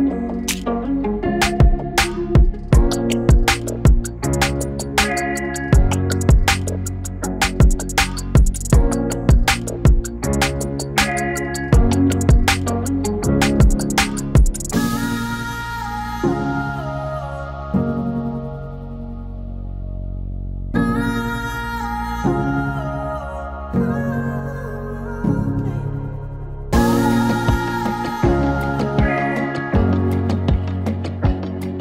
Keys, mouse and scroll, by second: 9.3 scroll up 1, 10.3 n, 11.7 space, 16.5 u, 17.4-19.2 drag, 19.2 click, 20.4 right click, 21.0-24.4 drag, 24.4 ctrl+z, 24.6 p, 26.4-30.6 drag, 30.9-31.8 drag.